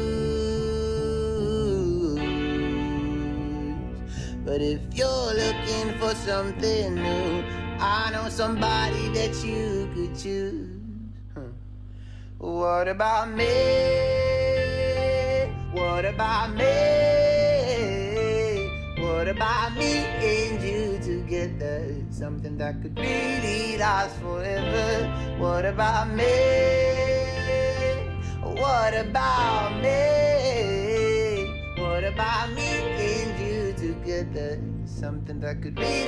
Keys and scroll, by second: 17.2 ctrl+space, 17.9-18.9 typing.